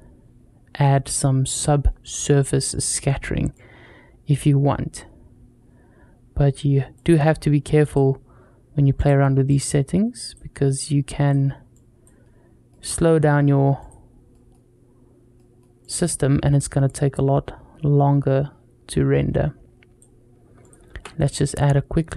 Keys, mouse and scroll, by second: 1.0 middle click, 3.4-6.8 drag, 7.7 click, 8.8-12.0 drag, 12.2 scroll down 1, 12.5 middle click, 13.6 click, 14.2 middle drag, 15.2 middle drag, 15.6-19.8 drag, 20.1 scroll down 1, 20.4 click, 20.7 shift+a.